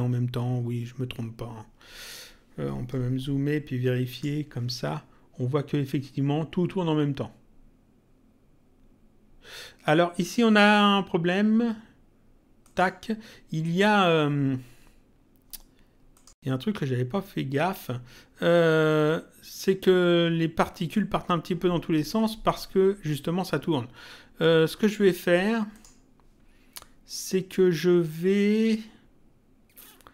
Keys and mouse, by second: 4.1 click, 12.6 click, 16.1 click, 25.7 click.